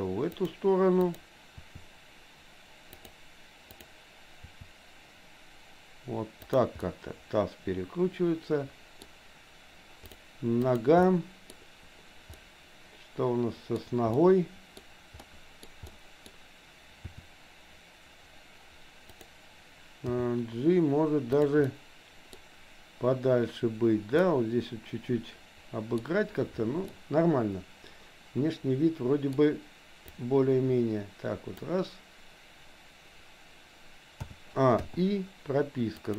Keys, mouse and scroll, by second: 1.2 click, 1.7 r, 4.4 r, 6.8-9.1 middle drag, 10.2 click, 10.6 click, 11.1 middle click, 12.4-13.7 middle drag, 14.1 middle click, 15.3 middle click, 15.8 middle click, 17.2 r, 19.9 g, 21.8 middle click, 24.3-26.1 middle drag, 26.9-29.3 middle drag, 30.1-31.7 drag, 34.2 a, 34.9 i, 35.9 click.